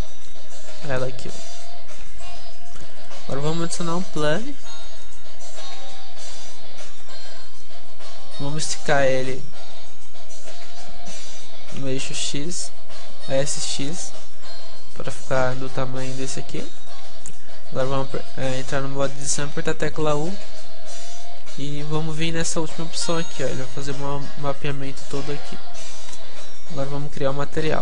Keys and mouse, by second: 2.9-5.2 middle drag, 5.2 shift+a, 6.3 alt+g, 6.9 KP_Decimal, 7.4-11.9 middle drag, 9.7 s, 16.5-20.1 middle drag, 17.1 Tab, 20.1 u, 24.0 u, 25.5 Tab.